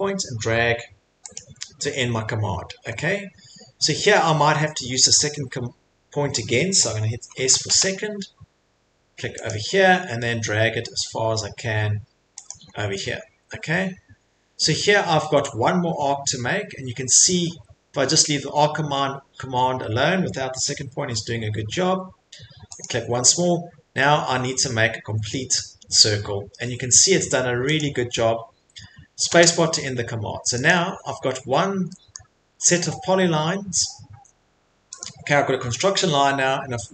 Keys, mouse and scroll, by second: 1.3 click, 1.9 middle click, 2.0 middle click, 2.8 middle click, 2.9 middle click, 3.3 middle click, 3.4 middle click, 4.0 middle click, 4.3 middle click, 6.9 scroll, 7.3 s, 9.5 click, 9.7 middle click, 9.8 middle click, 10.6 middle click, 10.7 middle click, 11.7 scroll, 12.5 click, 12.7 scroll, 13.4-13.7 scroll, 14.1 scroll, 14.7-15.4 scroll, 16.2 middle click, 16.3 middle click, 17.5 middle click, 22.8 click, 23.1 middle click, 23.1 middle click, 24.0 middle click, 24.4 middle click, 27.8 click, 28.2-28.9 scroll, 30.7 click, 35.0 Escape, 35.0 click, 35.0 middle click, 36.7 middle click.